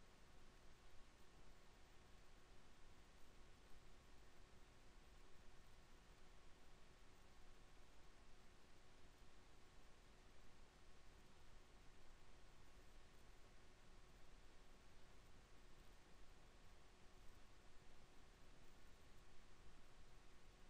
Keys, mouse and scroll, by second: 0.7 KP_7, 1.3 e, 5.4 alt+m, 7.7 Tab, 8.8 z, 12.0 alt+b, 15.9-20.6 middle drag.